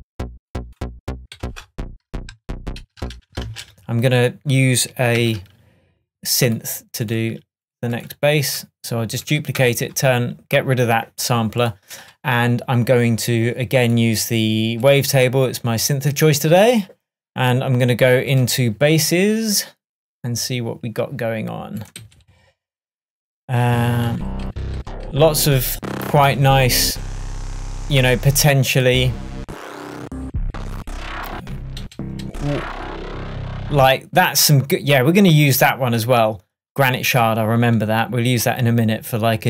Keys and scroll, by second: 1.2 0, 1.5 Return, 2.4 super+Return, 2.9 super+z, 3.5 super+space, 4.1 space, 5.2 super+d, 9.6 BackSpace, 22.0 Right, 23.7 Down, 29.4 Down.